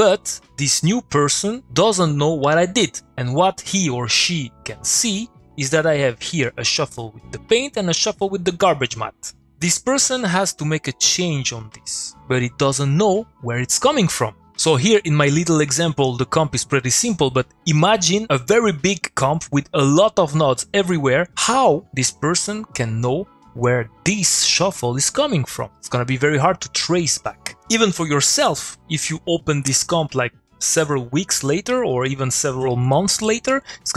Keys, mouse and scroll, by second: 2.8 middle click, 3.5 click, 3.7 middle click, 6.4 click, 8.7 click.